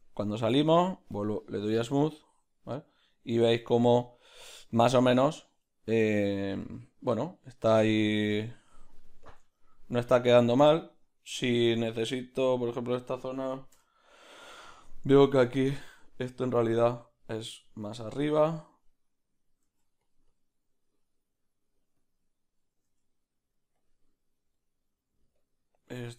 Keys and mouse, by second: 0.0 Tab, 1.7 z, 1.7 middle click, 3.6 ctrl+middle click, 4.0 middle click, 9.5 ctrl+middle click, 12.3-16.9 middle drag, 12.3 b, 16.9 click, 20.3-22.9 drag, 24.5 middle click, 25.4 click, 25.9 middle click.